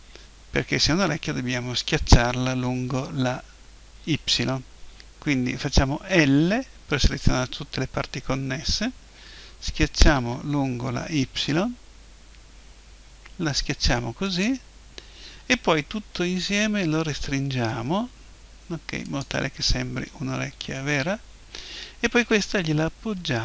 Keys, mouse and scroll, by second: 6.1 l, 10.1 s, 14.4-16.1 drag, 16.1 s, 19.2-20.8 drag, 20.3 KP_1, 22.2 g.